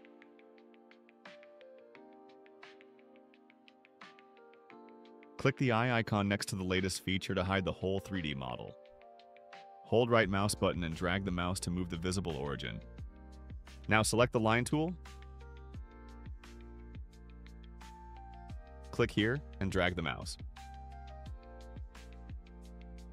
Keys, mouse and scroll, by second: 1.5 click, 7.8 click, 10.2-11.2 right drag, 15.9 click, 20.8 click.